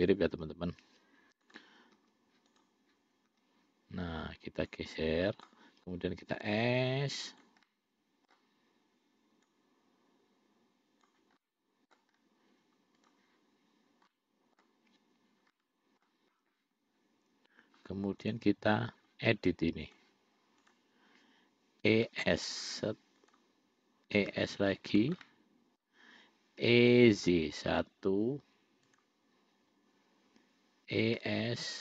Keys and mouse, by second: 1.8 click, 2.3 l, 2.8 click, 3.6 l, 5.0 click, 6.7 s, 7.9 middle click, 9.8-11.4 drag, 11.6 middle click, 13.3 click, 14.4 middle click, 15.8 middle click, 20.1 click, 22.2 e, 24.4 e, 25.5 middle click, 26.9 e, 31.2 e.